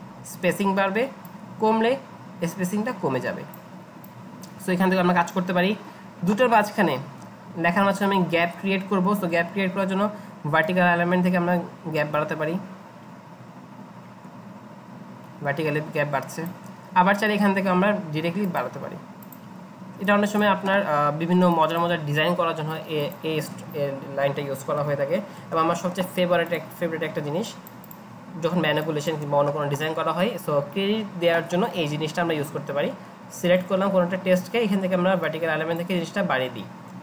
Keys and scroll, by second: 24.8 Delete.